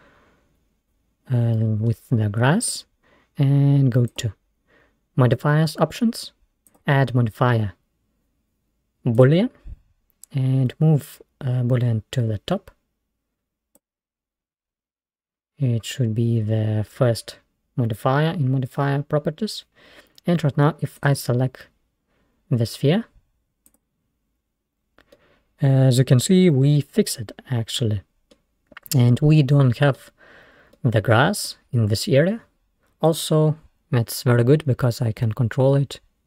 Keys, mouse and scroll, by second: 1.9-4.2 middle drag, 4.2 click, 6.7-9.4 drag, 11.1-13.8 drag, 21.0 click, 25.2-27.9 middle drag, 29.4-30.1 middle drag, 30.1-30.8 scroll up 1, 30.8-33.1 middle drag, 33.1 click, 35.3 s.